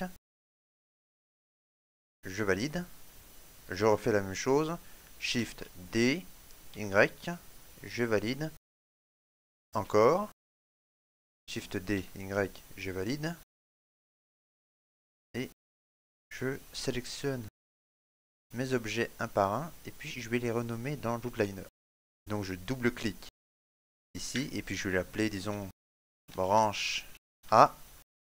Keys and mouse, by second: 14.0 shift+middle click, 14.5 middle click, 15.5 right click, 15.8 shift+middle click, 16.3 middle click, 16.8 shift+middle click, 17.2 middle click, 22.9 click, 25.6 BackSpace.